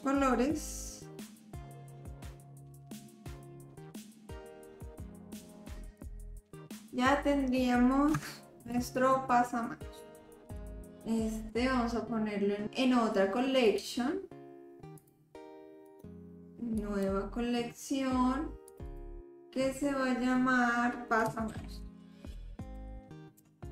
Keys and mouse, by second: 1.2 l, 1.4 l, 1.8-3.0 drag, 3.0 l, 3.1 l, 3.6-4.8 drag, 4.8 l, 5.1 l, 5.3 l, 5.8 click, 6.5 middle click, 8.2 Tab, 8.7 click, 10.6 click, 13.7 click, 15.0 click, 15.9-17.1 drag, 18.7 click, 18.9-23.7 drag.